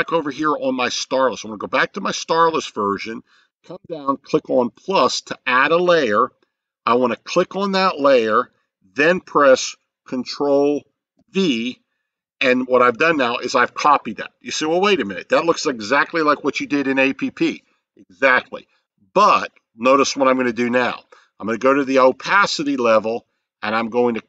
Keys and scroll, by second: 11.2 ctrl+v.